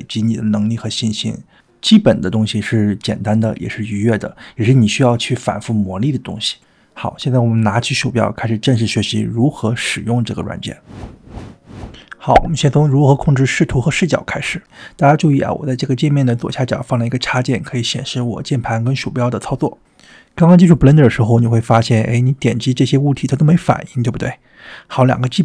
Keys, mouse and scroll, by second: 23.1 click, 23.7 click, 24.3 click, 24.7 drag, 25.3 drag.